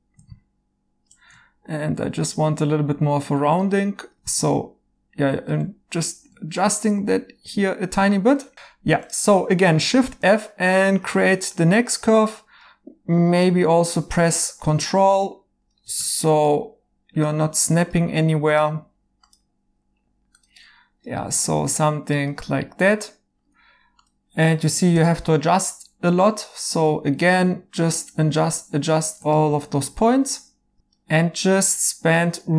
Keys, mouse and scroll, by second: 0.2 1, 10.9 f, 22.9 right click, 24.9 1, 30.7 ctrl+z.